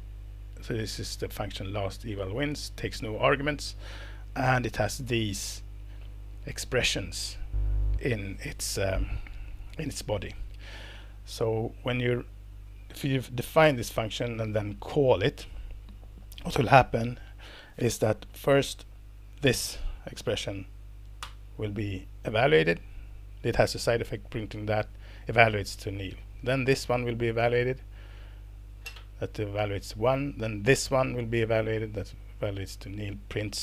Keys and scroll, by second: 13.6 alt+Return, 16.1 Escape, 21.2 ctrl+Return, 26.3 Down, 27.4 ctrl+Return, 30.0 Down, 30.6 ctrl+Return.